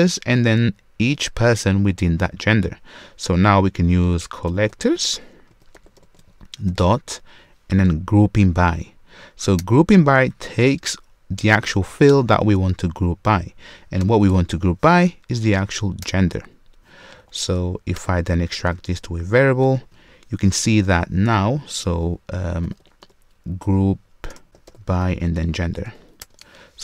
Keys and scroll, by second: 9.6 Return, 16.0 Return, 18.6 super+w, 19.7 alt+super+v.